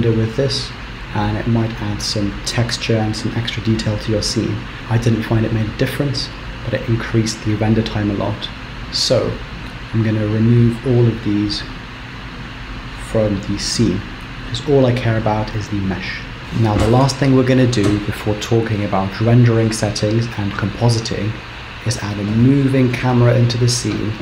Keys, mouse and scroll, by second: 10.6 click, 11.2 click, 11.8 click, 12.5 click, 13.1 click, 13.7 click, 14.3 click, 14.6 click, 14.6 click, 15.5 click, 16.3 click.